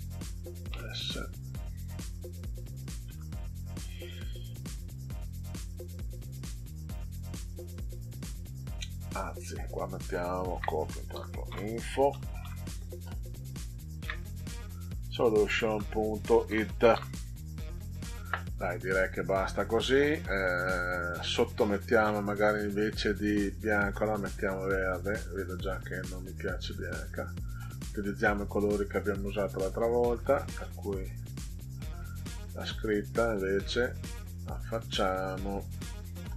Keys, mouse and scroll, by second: 0.7 s, 1.4 click, 3.0 ctrl+alt+ò, 7.7-9.6 drag, 10.5 ctrl+c, 11.1 i, 11.4 n, 12.1 f, 12.4 o, 13.0 click, 15.6 ., 16.4 o, 17.9 click, 23.1 click, 24.9 click, 26.8 click, 29.1 click, 30.2 click, 32.6 click, 33.4 click, 33.5 click, 34.4-35.4 drag.